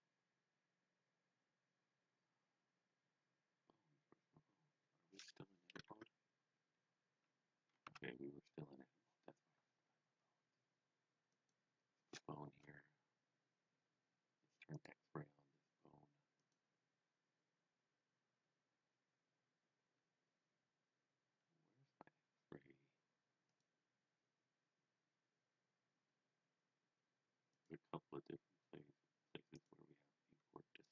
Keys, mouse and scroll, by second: 5.9 Tab, 11.3 click, 12.9-14.0 scroll up 1, 14.7 click, 16.4 click, 23.4 click, 24.6-25.9 scroll down 2, 27.5 click, 29.5 click, 30.6-30.9 scroll down 2.